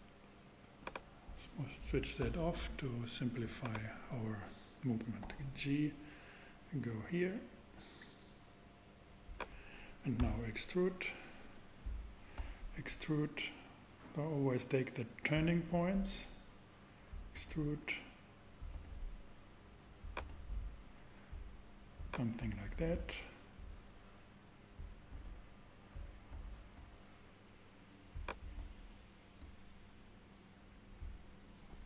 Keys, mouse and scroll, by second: 0.6 click, 5.2 g, 10.2 e, 12.3 e, 12.5 e, 15.6 click, 15.7 e, 17.3 e, 18.7 e, 18.8 e, 20.2 e, 22.0 click, 22.5 e, 25.1 e, 25.3 e, 26.3 e, 26.5 e, 27.9 click, 28.5 e, 28.6 e.